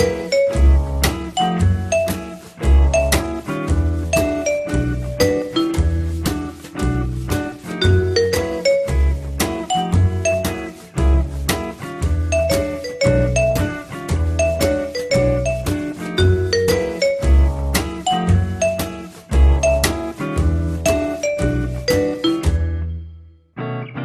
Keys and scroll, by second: 1.1 w, 14.1-15.0 typing, 18.0 l, 20.5 p, 21.1 z, 23.1 F3.